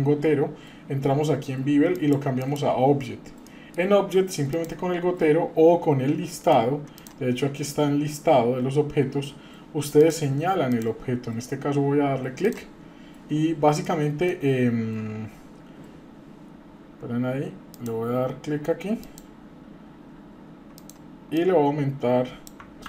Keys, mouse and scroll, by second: 1.9 click, 2.4 click, 3.4 middle click, 4.5 click, 7.0-10.8 drag, 13.8 middle click, 17.7 click, 20.7 click, 21.3-22.5 drag.